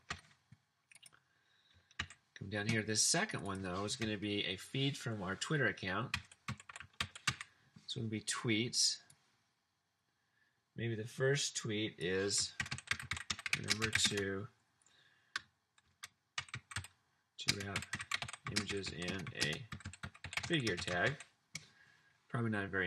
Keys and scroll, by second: 0.2 super+c, 2.0 super+v, 6.0-7.7 typing, 12.5-14.5 typing, 15.7-21.5 typing.